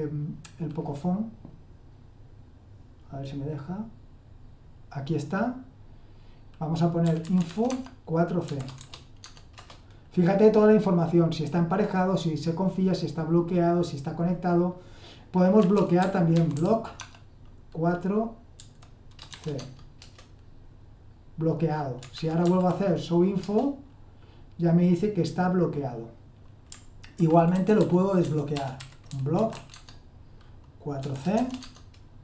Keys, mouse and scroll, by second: 6.8-8.8 typing, 9.2 Tab, 9.6 Return, 15.6-17.0 typing, 18.5-19.3 typing, 19.5 Tab, 20.0 Return, 22.1 ctrl+p, 22.4 ctrl+p, 23.4 Return, 27.3-31.5 typing, 31.6 Tab.